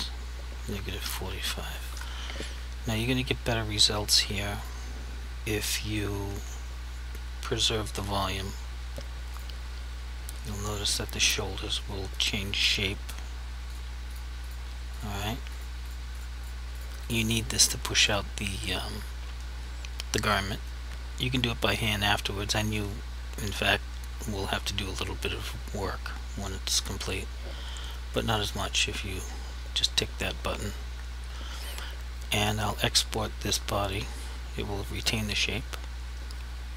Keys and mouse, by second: 0.6-1.3 typing, 1.9 Return, 4.1 click, 9.4 click, 13.7 click, 14.5 double click, 15.0 click, 15.2 double click, 15.6 click, 15.9 double click, 16.2 click, 16.4 double click, 16.8 click, 17.1 double click, 35.0 click.